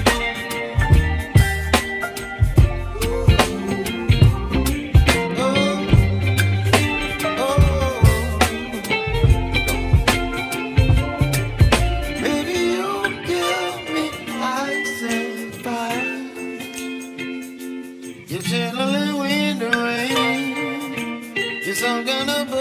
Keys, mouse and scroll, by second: 0.5 click, 1.6 click, 2.7 3, 3.1 click, 8.1 p, 9.1 click, 10.1 Tab, 10.8 click, 11.2 Tab, 12.5 a, 13.9 `, 15.5 s, 18.0-20.6 middle drag, 21.2-21.7 scroll down 1, 21.7 Tab, 22.2-22.6 middle drag.